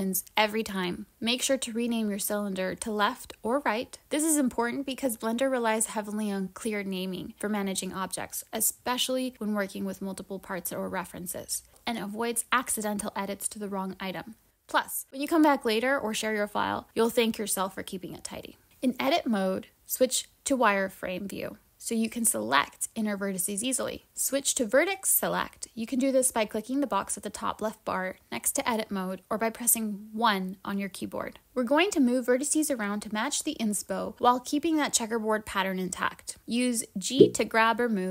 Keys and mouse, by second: 18.3 click, 19.1-20.3 typing, 23.4-25.0 typing, 24.7 click, 32.0-37.2 typing, 32.3 click, 32.5 click, 32.7 click, 33.4 click, 33.9 click, 35.8 click, 35.9 click, 36.2 click, 36.5 shift+click.